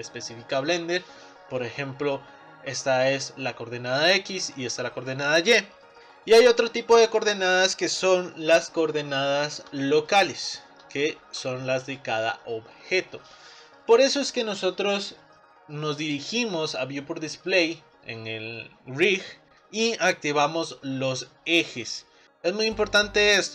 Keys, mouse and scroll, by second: 2.2 middle click, 3.1-6.5 drag, 7.0-8.5 middle drag, 8.5-9.3 scroll up 8, 9.4 middle click, 10.3-11.0 scroll up 3, 11.0 shift+middle click, 11.9 click.